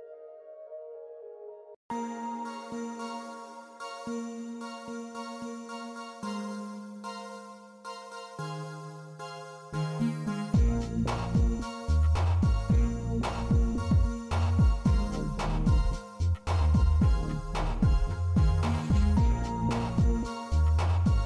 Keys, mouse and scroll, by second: 1.2-2.8 middle drag, 3.2 s, 7.6 shift+middle click, 8.7 shift+middle click, 10.4 click, 12.0-13.6 drag, 14.8 shift+middle drag, 15.2-15.6 middle drag, 17.5 click, 19.0 click, 20.8 n.